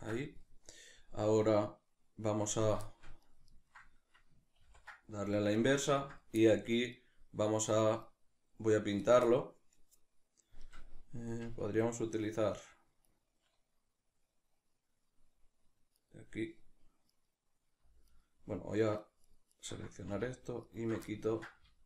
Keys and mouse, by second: 4.6 ctrl+i, 13.1-21.1 right drag, 21.1 middle click.